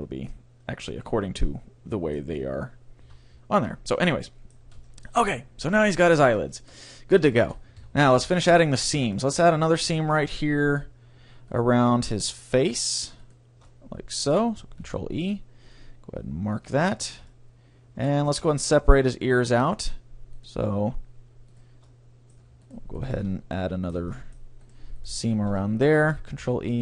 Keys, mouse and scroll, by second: 1.5-2.6 middle drag, 3.1 a, 3.4 scroll down 1, 3.7 middle click, 3.9-6.0 middle drag, 7.9 Tab, 8.3 a, 9.1 a, 11.5-15.0 right drag, 13.7-15.6 middle drag, 14.8 ctrl+e, 17.0 middle click, 18.3 middle click, 18.5-20.4 middle drag, 22.7 shift+right click, 26.4 ctrl+e.